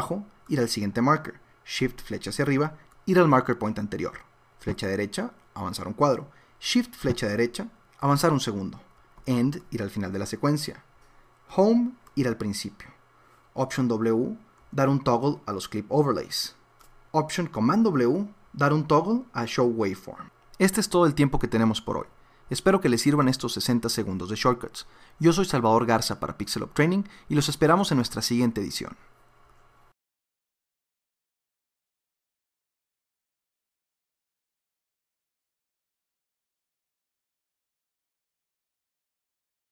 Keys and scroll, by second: 2.1 shift+Up, 4.6 Right, 7.0 shift+Right, 9.2 End, 11.5 Home, 14.6 alt+w, 16.0 alt+w, 18.4 alt+super+w, 36.1-37.5 typing, 39.1 typing.